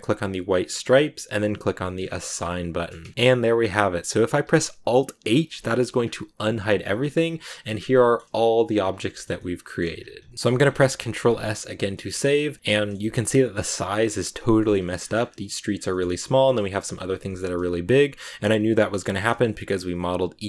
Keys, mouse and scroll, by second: 0.2 click, 1.5 click, 1.9 scroll down 2, 2.1 middle click, 2.9 Tab, 3.0 scroll down 2, 3.1-5.6 middle drag, 5.6 alt+h, 6.0-6.5 scroll down 3, 6.3 a, 7.1-7.5 scroll down 1, 7.5 middle click, 8.2 scroll up 1, 8.3-9.0 scroll down 1, 9.0 shift+middle click, 9.2 scroll up 1, 9.3 middle click, 9.8-11.0 scroll up 5, 11.0 ctrl+s, 11.7 a, 11.8-13.2 shift+middle drag, 13.2-13.8 scroll up 2, 13.8-14.5 scroll down 2, 14.5-15.1 scroll up 4, 14.8 middle click, 15.1 scroll down 1, 15.1-15.5 scroll up 2, 15.6 scroll down 2, 15.7 scroll up 1, 15.8-20.3 shift+middle drag, 20.3 scroll up 1, 20.3-20.4 middle drag.